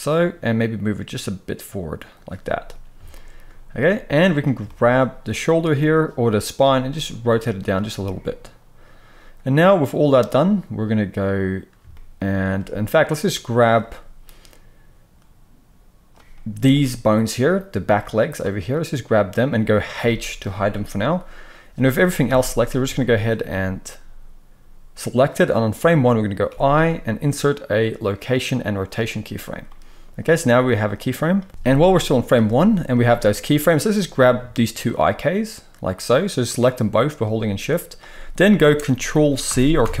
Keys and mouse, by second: 6.6 r, 13.7-33.9 drag, 19.9 h, 20.7 KP_3, 22.2 a, 31.4 KP_3, 33.9-34.8 middle drag, 34.8 shift+click, 35.0-40.0 shift+middle drag, 39.4 ctrl+c, 39.8 ctrl+c.